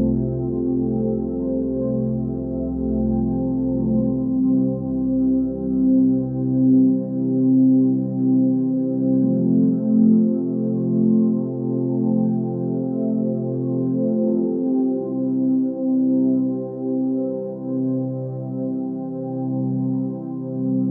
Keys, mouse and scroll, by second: 6.8 ctrl+r, 9.3 click, 10.1-10.5 scroll up 1, 10.5-13.5 middle drag, 13.5 KP_1, 16.8-17.3 scroll up 2, 18.7-19.7 scroll down 2.